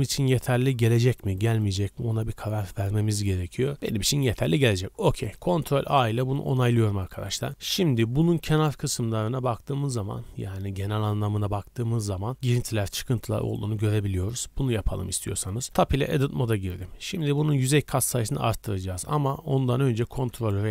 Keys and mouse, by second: 0.4-2.4 middle drag, 2.4-2.8 drag, 5.8 ctrl+a, 15.1 Tab, 16.7 a, 16.9 a, 20.1 ctrl+r.